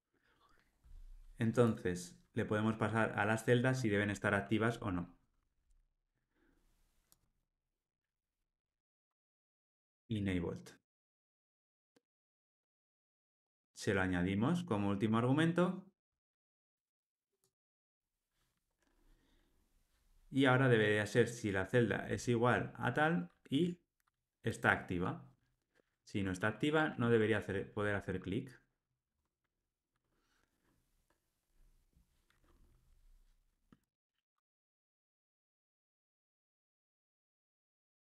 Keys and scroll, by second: 10.7 Return, 12.2 Tab, 14.3 alt+Return, 23.5 Tab, 26.4 Tab, 26.8 ctrl+alt+o, 33.8 ctrl+r.